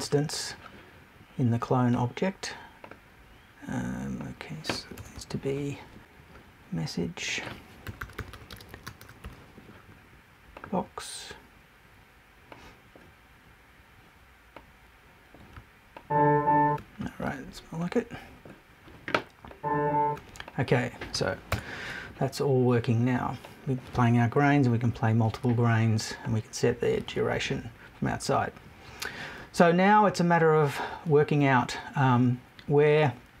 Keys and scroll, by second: 5.0 BackSpace, 21.5 BackSpace, 24.4 Left.